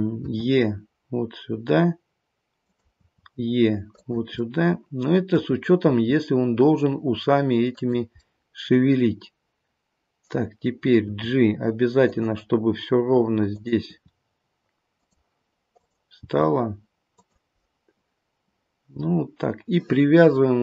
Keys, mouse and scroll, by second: 0.2 e, 3.0 e, 4.3 middle click, 5.9 e, 8.2 middle click, 10.9 g, 13.4 click, 15.7 click, 16.4 g, 17.6 middle click.